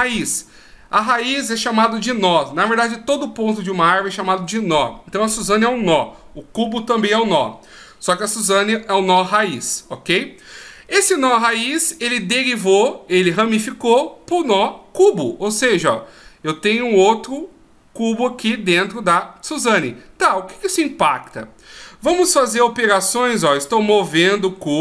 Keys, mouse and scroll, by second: 21.6 right click, 23.2 g.